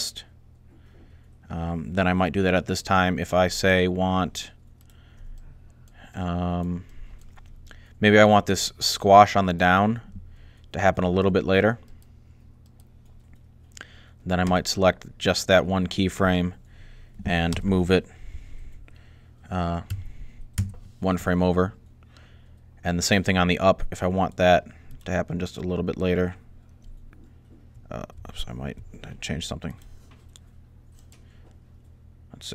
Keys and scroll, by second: 17.3 g, 19.6 1, 27.6 super+z, 28.0 super+z, 28.6 super+z.